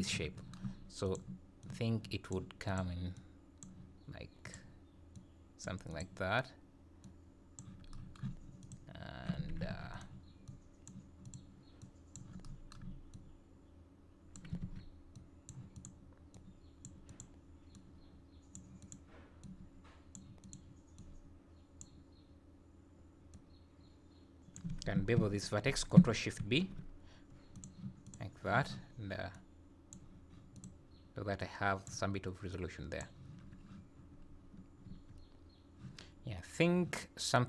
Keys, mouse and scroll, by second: 1.1 click, 1.6 click, 2.7 click, 3.2 click, 4.5 click, 5.2 click, 5.9 click, 7.1 click, 8.6 click, 9.8 alt+a, 10.0 click, 10.5 click, 11.3 click, 11.8 click, 13.1 click, 14.6 ctrl+z, 15.2 click, 15.8 click, 16.4 click, 17.1 click, 17.8 click, 18.8 click, 19.6 click, 20.4 click, 21.1 click, 23.4 click, 26.4 ctrl+shift+b, 28.1 click, 29.4 click, 30.6 click, 31.4 click, 32.5 click, 34.3-34.8 scroll down 1, 34.9 Tab, 36.1 scroll down 2.